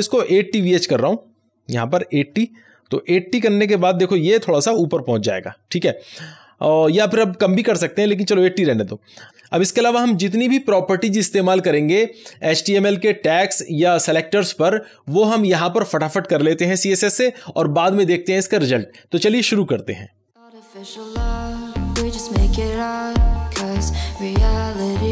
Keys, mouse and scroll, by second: 0.1-2.1 drag, 2.1-3.3 typing, 3.7 Delete, 4.3 ctrl+s, 20.3 click, 20.3-25.1 typing, 23.4 ctrl+s, 23.8 Return, 24.2 Return.